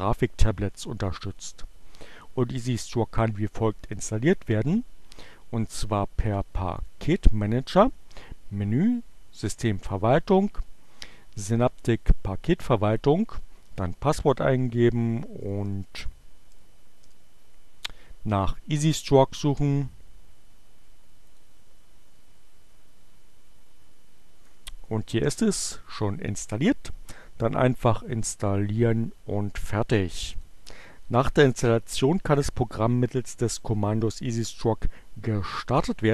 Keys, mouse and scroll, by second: 6.8 click, 11.7 click, 14.1-16.6 typing, 17.0 Return, 21.3-23.4 typing, 21.3 click, 29.9 click.